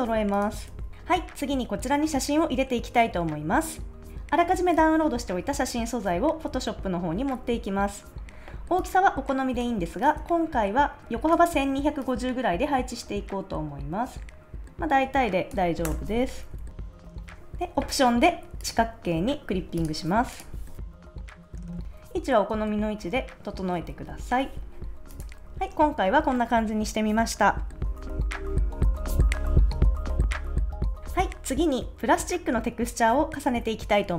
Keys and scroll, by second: 0.7 super+s, 4.1 a, 15.8 Return, 16.3 shift+Right, 16.9 Up, 17.1 shift+Right, 20.8 Up, 21.3 Down, 21.5 shift+Right, 22.0 shift+Left, 23.0 Right, 24.1 Left, 28.1 super+s.